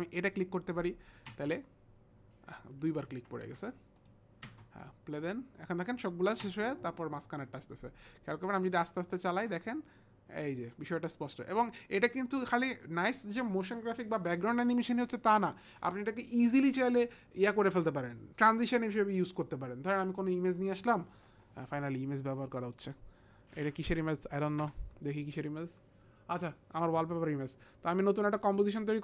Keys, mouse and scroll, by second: 0.3 click, 1.4 space, 3.1 ctrl+z, 4.0 click, 5.5 ctrl+z, 5.5 click, 5.5 space, 6.4 space, 8.1 click, 8.1 space, 19.9 click, 20.4 click, 20.6 click, 22.7 click.